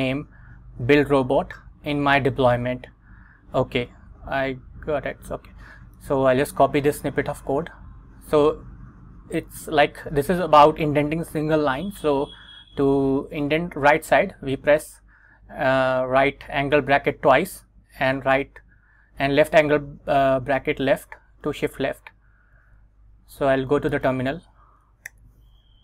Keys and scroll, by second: 22.9 super+Tab, 24.0 Return, 25.2 super+v.